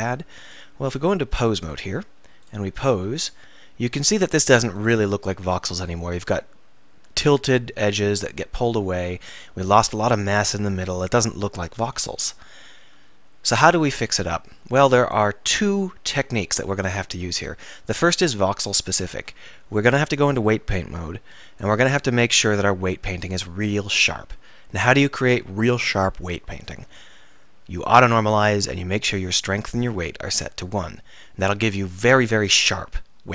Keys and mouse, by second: 3.0 r, 12.3 alt+r, 18.1 Tab, 19.2 Tab, 21.7 Tab, 24.0-27.9 middle drag.